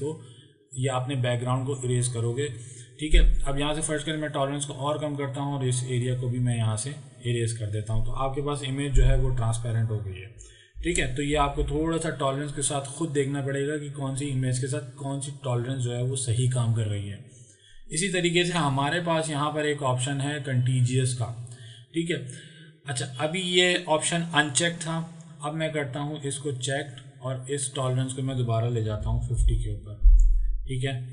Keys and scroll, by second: 10.8 ctrl+z, 29.0 KP_5, 29.1 KP_0, 29.4 Return.